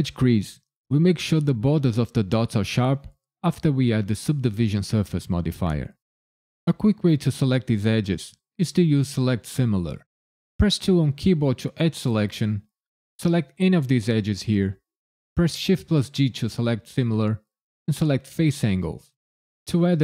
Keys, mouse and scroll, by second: 10.8 2, 13.0 click, 15.6 shift+g.